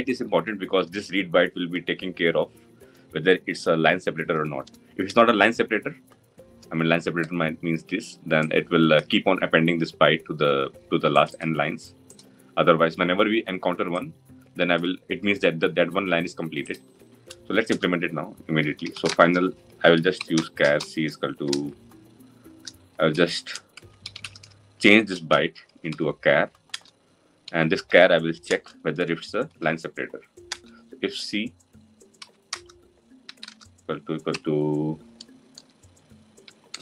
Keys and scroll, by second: 26.5 Return.